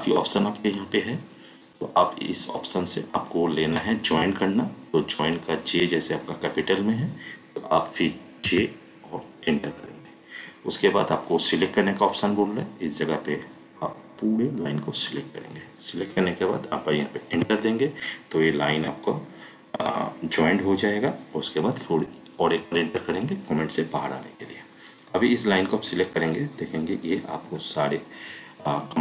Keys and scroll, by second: 8.5 j, 9.8 Return, 17.3 Return, 22.7 Return.